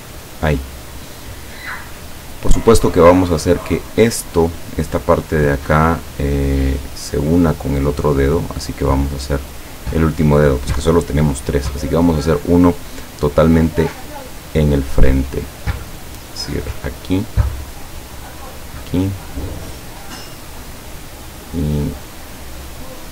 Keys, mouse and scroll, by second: 0.2 click, 9.9 click, 14.5 click, 17.2 click, 18.5 click.